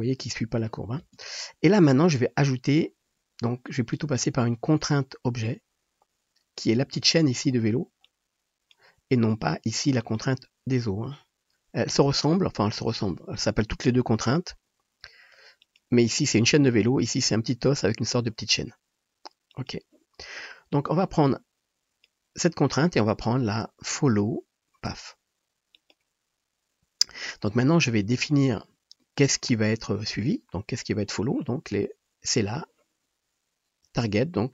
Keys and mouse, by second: 1.1 space, 3.9 middle click, 3.9 right click, 10.1-14.2 drag, 14.4-19.5 drag, 19.7-20.7 drag, 28.6 shift+middle drag, 29.0-30.7 middle drag, 32.6-34.5 drag.